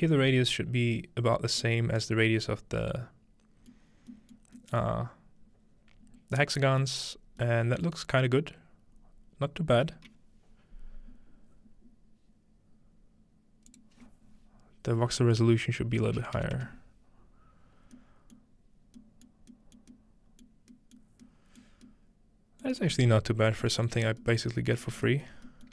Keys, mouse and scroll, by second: 1.6-6.4 middle drag, 5.0-6.4 scroll up 2, 7.1 middle click, 7.1-7.4 scroll down 2, 8.9 middle click, 8.9-9.6 scroll up 2, 9.6 scroll down 2, 11.1 scroll up 2, 13.7-14.9 drag, 18.4 middle click, 18.9-20.4 scroll down 1, 19.3 middle click, 19.8 middle click, 20.4-20.7 scroll down 1, 21.1 middle click, 21.6 middle click, 21.9-22.6 scroll up 2, 22.6-23.0 scroll up 1, 23.0 middle click, 23.9-25.0 scroll down 2, 24.1 shift+middle click, 24.5 middle click, 25.0 shift+middle click.